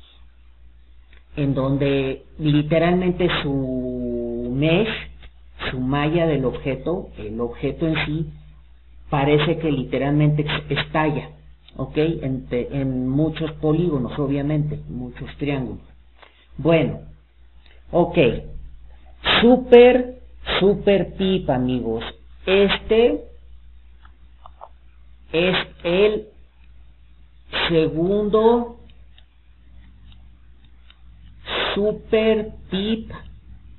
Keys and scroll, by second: 16.6 alt+d.